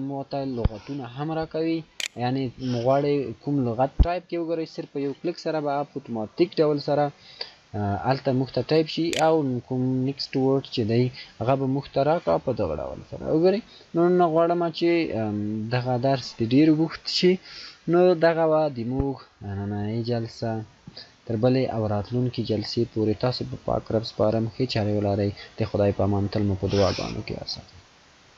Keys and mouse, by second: 13.2 e, 13.3 click.